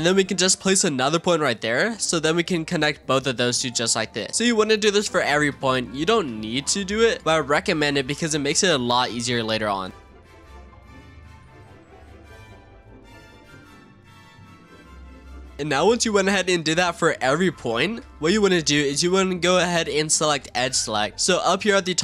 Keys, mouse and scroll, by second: 2.1 shift+click, 3.2 f, 3.6 click, 3.9-4.3 scroll down 4, 4.3-6.4 shift+middle drag, 6.4 scroll up 2, 7.0 click, 7.8 shift+click, 8.9 f, 9.7 click, 10.0 shift+click, 10.1-15.4 typing, 10.3 ctrl+r, 10.6 shift+click, 10.8 click, 11.0 shift+click, 11.1 click, 11.3 shift+click, 11.4 shift+middle click, 11.7 click, 11.8 shift+click, 11.9 click, 12.0 shift+click, 12.2 click, 12.3 shift+click, 12.6 ctrl+r, 12.9 shift+click, 13.1 click, 13.2 shift+click, 13.4 click, 13.5 shift+click, 13.6 shift+middle click, 13.8 click, 13.9 shift+click, 14.1 click, 14.2 shift+drag, 14.4 click, 14.5 shift+click, 14.8 ctrl+r, 15.0 shift+click, 15.2 click, 15.3 shift+click, 15.5-16.2 scroll down 2, 16.2-20.5 shift+middle drag, 20.5-22.0 scroll up 2.